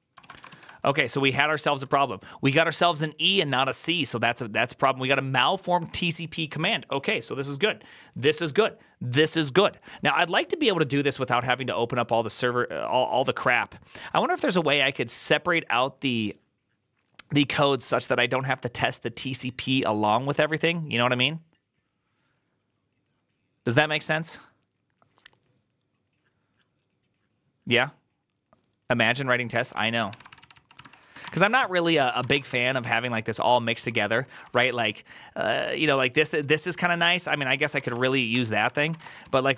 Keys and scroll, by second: 0.1 ctrl+a, 0.2 [, 0.4 ctrl+u, 1.3-4.9 typing, 29.6 ctrl+c, 29.8 ctrl+a, 30.0-39.5 typing, 30.2 ctrl+c, 30.6 ctrl+c, 31.8 ctrl+c, 37.3 ctrl+c, 37.4 ctrl+c.